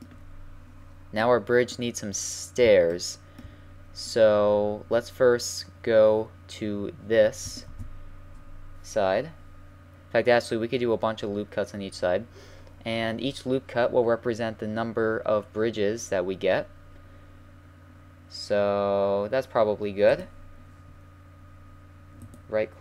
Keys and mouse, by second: 2.0-3.0 middle drag, 3.1 middle drag, 5.0-7.7 drag, 7.7 ctrl+r.